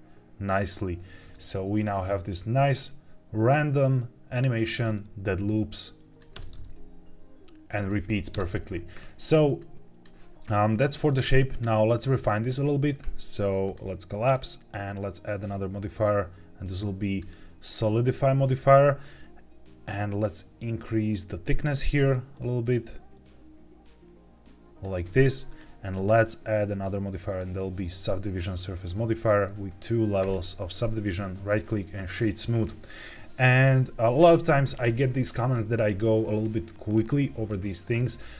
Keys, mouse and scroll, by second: 6.3 space, 8.2 space, 9.5 click, 11.4 click, 12.2-12.9 scroll up 2, 13.6 click, 14.1-17.2 drag, 18.7 click, 22.0-24.8 drag, 25.4 click, 25.9-27.3 drag, 30.1 click, 31.0-32.1 right drag.